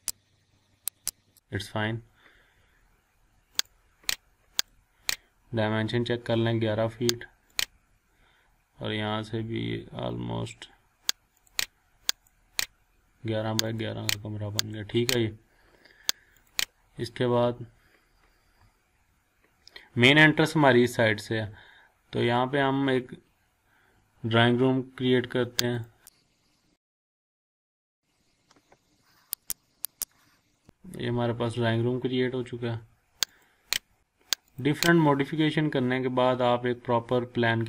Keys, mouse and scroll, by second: 0.1 click, 1.1 click, 3.6 click, 7.6 click, 11.5 click, 17.1 scroll down 1, 17.6-18.0 scroll up 1, 18.0-18.4 scroll down 1, 18.4 scroll up 1, 19.5 scroll down 1, 21.8-22.2 scroll up 1, 22.8-23.1 scroll down 1, 25.7 click, 27.8 click, 29.4 click, 30.4 scroll up 1, 30.5 scroll down 1, 30.9-31.3 scroll up 1, 33.3 click, 34.0 scroll down 1, 34.5 click, 34.9-35.5 scroll up 1.